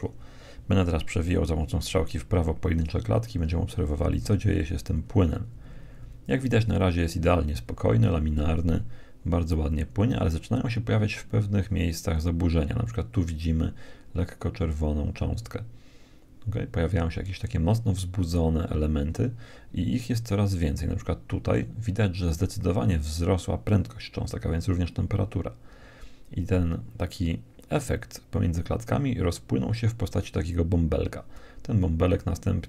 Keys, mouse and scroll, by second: 1.1 Right, 1.6 Right, 2.0 Right, 2.4 Right, 2.8 Right, 3.2 Right, 3.4 Right, 3.5 Right, 3.7 Right, 3.9 Right, 4.1 Right, 4.3 Right, 4.5 Right, 4.7 Right, 4.8 Right, 5.0 Right, 5.2 Right, 5.4 Right, 5.7 Right, 5.9 Right, 6.6 Right, 6.8 Right, 7.1 Right, 7.3 Right, 7.5 Right, 7.7 Right, 7.9 Right, 8.1 Right, 8.3 Right, 11.5 Right, 13.5-15.1 middle drag, 16.5 Right, 17.1 Right, 17.7 Right, 18.2 Right, 19.2 Right, 25.1 Right, 30.7 Right.